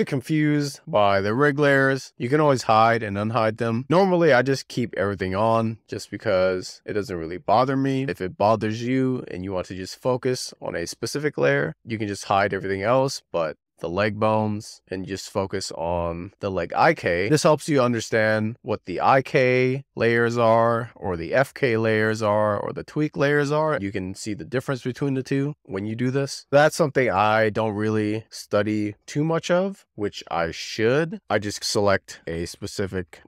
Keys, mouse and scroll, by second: 0.6-1.5 scroll down 6, 1.9 click, 3.2 click, 4.0 click, 5.1 scroll down 1, 7.9 click, 8.2 drag, 9.1 click, 10.0 click, 11.0-13.8 shift+middle drag, 13.8 click, 15.0 click, 17.5 click, 18.6 click, 20.6 z, 21.8 click, 23.2 click, 23.9 z, 24.7-25.1 scroll down 4, 25.3 click, 26.4 click, 27.7 z, 28.7 shift+click.